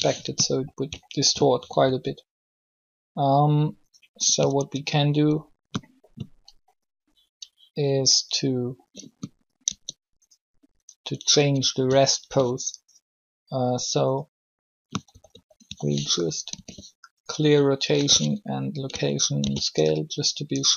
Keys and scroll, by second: 1.8 alt+shift+r, 4.3 Tab, 9.6 alt+shift+Tab, 15.0 typing, 16.2 alt+r, 17.9 alt+g, 19.3 alt+s.